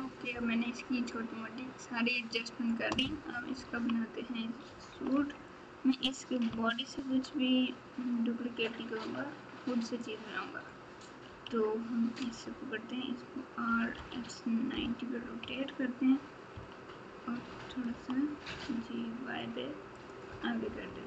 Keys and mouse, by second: 3.3 KP_6, 3.5 KP_6, 4.6 KP_4, 4.9 KP_4, 5.1 KP_1, 7.0 shift+a, 15.4 KP_1, 16.5 KP_3, 17.9 g, 20.8 KP_1.